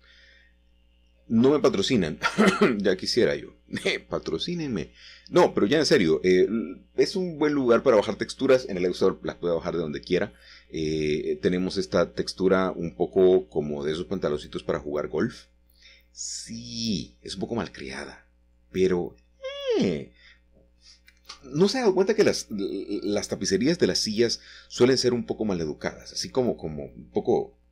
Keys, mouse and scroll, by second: 1.3 click, 2.1 click, 4.1 click, 6.4-8.2 scroll down 2, 8.2-9.8 scroll down 1, 9.8-11.0 scroll down 1, 11.0-13.1 scroll up 1, 14.1 click, 16.3 click, 18.6-21.3 drag, 22.5 middle click, 23.2-23.9 scroll up 1, 23.9-24.4 scroll up 1, 24.4 scroll up 1, 25.1-25.7 scroll down 2.